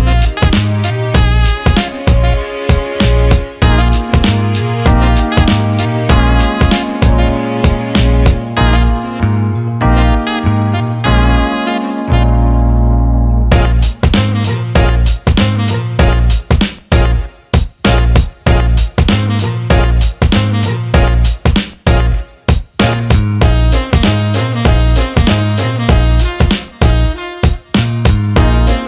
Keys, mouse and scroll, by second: 0.3-2.4 drag, 4.5 click, 7.9 click, 8.8-10.8 alt+middle drag, 11.2-20.7 drag, 21.3-24.3 drag, 25.7 ctrl+s, 26.3-27.5 alt+middle drag, 28.0 click.